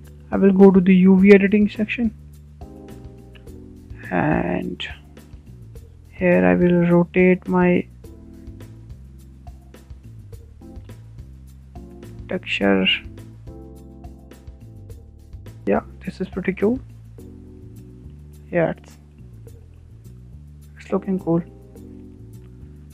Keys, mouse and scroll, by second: 0.0 click, 1.2-1.5 scroll down 7, 1.5-3.2 shift+middle drag, 3.2 z, 3.5-3.9 scroll up 5, 3.9-4.6 shift+middle drag, 4.6-5.0 scroll up 3, 5.0-6.4 shift+middle drag, 6.4-7.8 drag, 13.5 Tab, 13.6 scroll down 5, 13.7 scroll up 3, 13.9 Tab, 14.2 click, 15.1 Tab, 15.3 scroll down 3, 15.4 middle drag, 15.5 scroll up 4, 15.6-15.9 scroll down 4, 15.9 middle click, 16.7 scroll down 4, 16.9-18.0 shift+middle drag, 18.0-18.4 scroll up 5, 18.4 shift+middle drag, 18.6 scroll down 3, 18.9-20.8 middle drag, 20.8-21.4 scroll up 2, 21.4 scroll down 1, 21.6-22.8 shift+middle drag, 22.8 click.